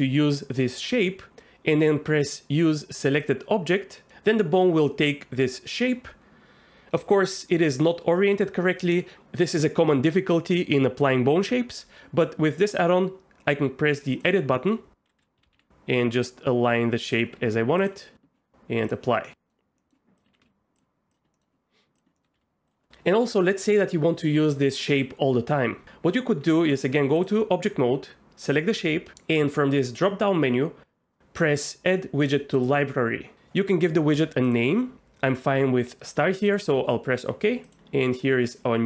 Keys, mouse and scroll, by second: 4.0 middle click, 14.5 middle click, 15.2 KP_3, 15.4 a, 15.5 r, 17.1 click, 17.3 g, 17.8 click, 18.9 click, 19.2 middle click, 19.8 middle click, 20.3 g, 20.4 z, 20.7 click, 21.1 click, 21.3 middle click, 22.1 middle click, 22.3 r, 26.4 Tab, 29.8-36.5 drag, 37.7-38.8 drag.